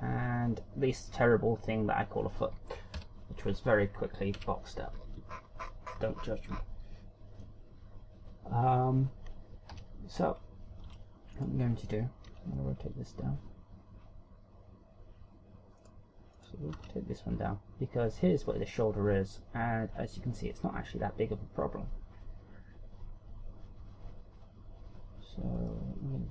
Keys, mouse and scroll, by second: 0.4 shift+scroll up 1, 1.5-2.1 shift+scroll down 6, 3.5 shift+scroll down 2, 3.7 KP_1, 5.1 KP_1, 5.7-6.1 scroll down 5, 6.2-7.4 shift+scroll up 17, 8.2 middle click, 8.2 scroll up 1, 9.6-10.1 shift+scroll up 5, 10.4 KP_1, 11.7 Tab, 12.1 right click, 13.1 r, 16.6 right click, 17.1 right click, 17.5 r.